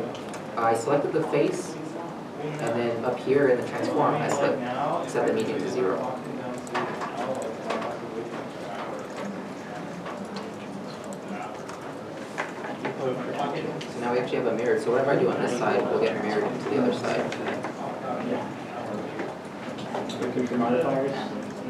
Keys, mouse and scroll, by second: 0.6 Tab, 13.0 Tab, 13.0 middle click, 15.7 s, 17.6 s, 17.7 right click, 18.2 e, 19.2 s, 21.1 right click.